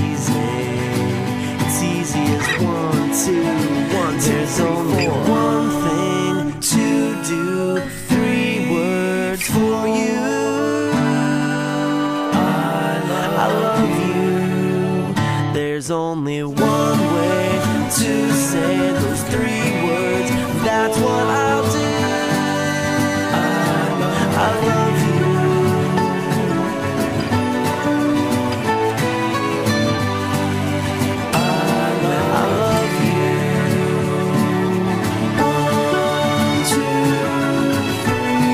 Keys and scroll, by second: 3.1 ctrl+z, 5.8 ctrl+z, 6.3 ctrl+z, 10.7 ctrl+z, 14.6 ctrl+z, 15.6 ctrl+z, 23.6 ctrl+z, 25.4 ctrl+z, 31.8 ctrl+z.